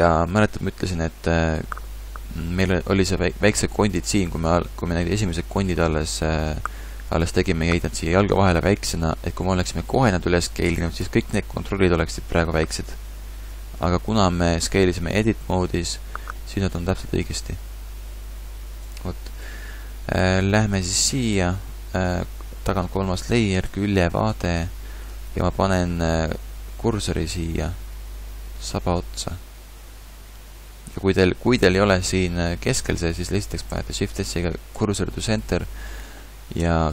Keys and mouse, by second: 18.9-23.7 middle drag, 23.7 KP_3, 24.3 KP_5, 24.6 KP_5, 29.2 KP_1, 33.6 shift+s, 36.6 KP_3.